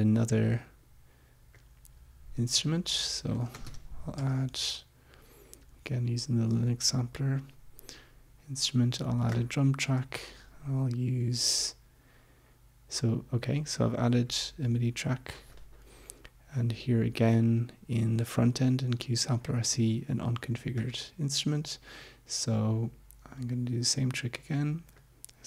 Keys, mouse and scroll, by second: 0.4-1.8 drag, 2.5 click, 3.1-4.7 typing, 9.3 click, 15.6 click, 19.4 right click, 20.8 click, 23.4-25.2 drag.